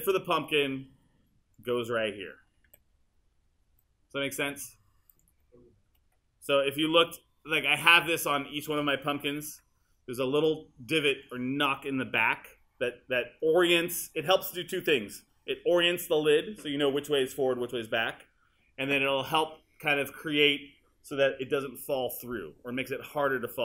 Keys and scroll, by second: 0.0 w, 2.7 r, 6.6 q.